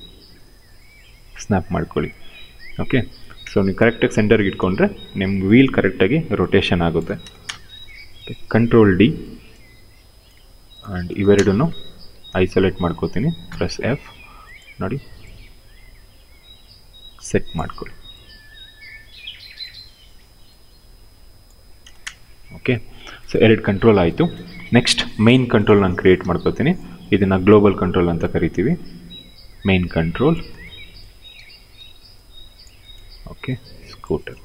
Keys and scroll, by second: 3.0 ctrl+1, 4.0 space, 5.7 x, 6.9 space, 8.5 ctrl+d, 10.8 space, 11.7 ctrl+1, 13.1 f, 21.5 space, 26.0 r, 28.3 w, 31.0 t.